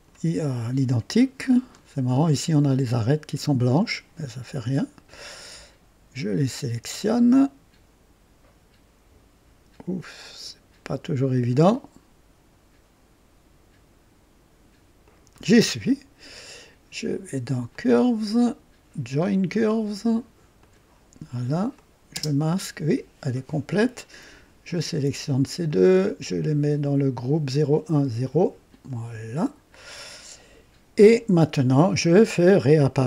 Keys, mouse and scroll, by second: 0.4-1.3 drag, 1.4-1.8 scroll up 1, 1.9 right click, 5.0 click, 6.9 ctrl+click, 11.3 ctrl+click, 15.0 ctrl+click, 17.8 click, 20.5 click, 21.7 click, 22.1 space, 24.6 ctrl+click, 25.6-29.0 ctrl+drag.